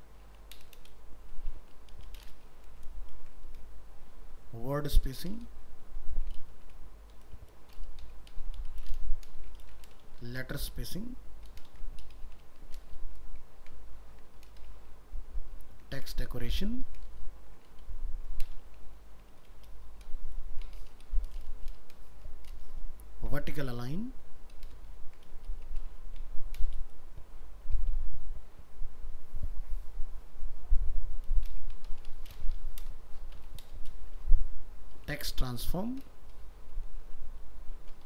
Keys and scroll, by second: 3.2 ctrl+v, 9.6 ctrl+c, 10.0 ctrl+Return, 10.1 ctrl+v, 11.8 ctrl+shift+Left, 15.7 ctrl+v, 16.9 ctrl+shift+Left, 23.2 ctrl+v, 24.8 ctrl+shift+Left.